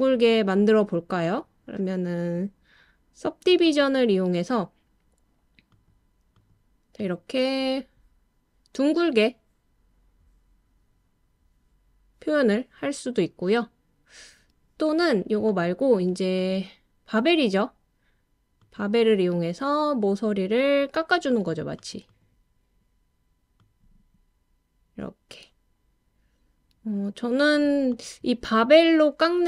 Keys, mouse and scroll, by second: 5.7 click, 6.4 click, 7.1 click, 15.5 click, 16.3 click, 21.3 click, 21.7 click, 23.6 click.